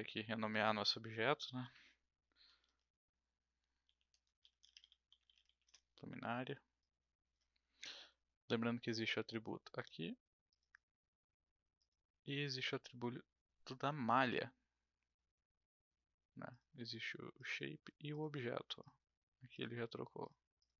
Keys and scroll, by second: 2.6 l, 3.8-5.9 typing.